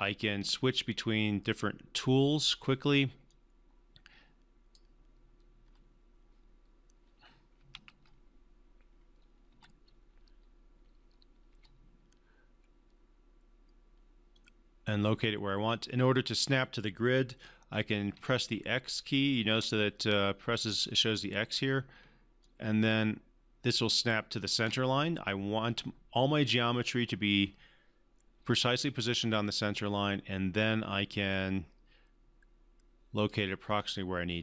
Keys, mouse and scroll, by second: 2.5 r, 3.3-4.8 drag, 5.6 3, 7.7 ctrl+z, 9.5 1, 11.5 w, 13.6 w, 14.3-17.5 drag, 18.1-19.5 typing, 21.2-24.6 typing, 22.4 click, 31.3-33.5 drag.